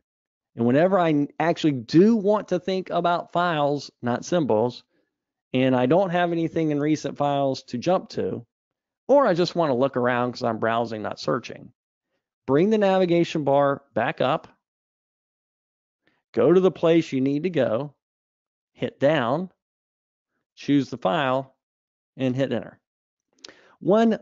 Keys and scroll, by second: 14.2 super+Up.